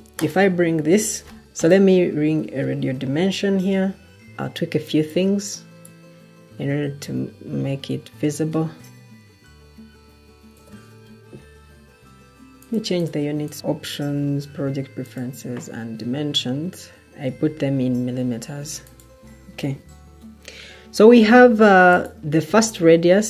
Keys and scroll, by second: 1.4 Delete, 2.7 ctrl+t, 6.4 ., 7.5-9.5 typing.